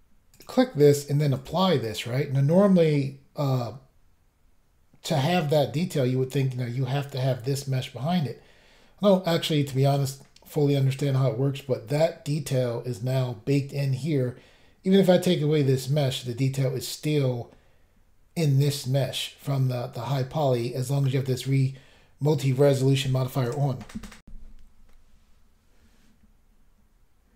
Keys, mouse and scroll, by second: 0.3 click, 0.4 click, 1.4 click, 1.5 click, 24.2 Pause, 24.5 Insert.